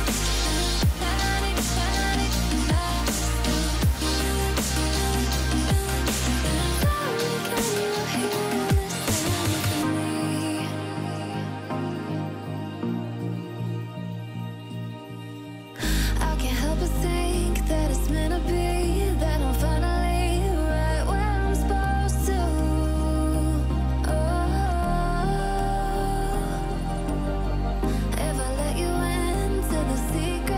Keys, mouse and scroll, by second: 1.0 click, 4.5 click, 7.3 click, 11.6 click, 12.3 click, 13.1-13.7 alt+scroll down 4, 13.3 click, 13.7 scroll up 2, 14.0-14.5 click, 14.5 ctrl+c, 14.7 alt+scroll up 2, 14.8 click, 15.8 click, 16.1 Return, 16.5 click, 16.9 alt+scroll up 1, 17.0 click, 17.2 BackSpace, 17.6 click, 18.6 click, 20.0 click, 20.7 click, 22.1-22.7 click, 22.8 alt+scroll down 1, 22.9 click, 23.0 alt+scroll up 1, 23.0-24.4 drag, 25.6 alt+scroll up 1, 25.7-27.3 click, 27.1 click, 27.7-28.0 alt+scroll down 1, 28.0 alt+scroll up 1, 28.2-29.0 drag, 29.1 alt+scroll up 2, 29.3 alt+scroll down 2, 29.8-30.2 click, 30.4-30.5 ctrl+c.